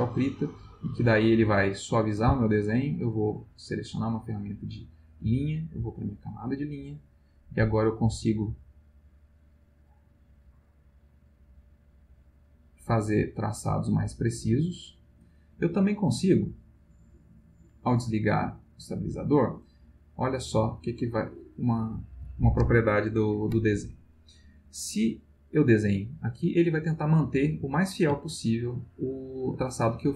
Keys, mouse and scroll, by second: 0.5-2.3 drag, 3.2 click, 4.0 click, 5.2 click, 5.8 click, 7.7-15.1 drag, 17.2 click, 18.5 click, 20.4-22.1 drag, 25.7-27.1 drag, 28.2-29.7 ctrl+middle drag.